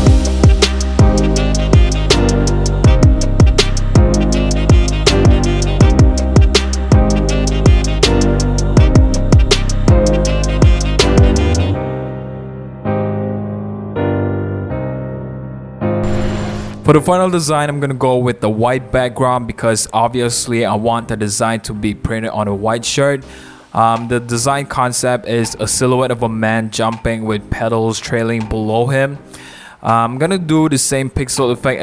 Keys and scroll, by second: 0.1 Return, 0.1 BackSpace, 0.3 space, 0.9 super+a, 1.0 super+d, 1.1 super+0, 1.1 super+-, 1.6 t, 3.0 super+z, 3.2 v, 3.3 super+1, 3.4 super+0, 3.8 t, 5.5-9.0 typing, 7.2 Return, 8.1 super+0, 8.1 super+-, 9.3 super+=, 9.5 super+z, 10.0 super+d, 10.5 BackSpace, 10.6 Return, 10.9 space, 11.1 super+a, 11.3 super+d, 11.4 super+0, 11.5 super+-, 11.5 super+=, 12.4 super+0, 12.6 super+=, 12.6 super+-, 14.0-14.3 typing, 15.1 super+c, 15.1 super+d, 15.1 super+v, 16.5 shift+super+5, 17.7 t, 19.7 super+v, 22.4 v, 26.4 c.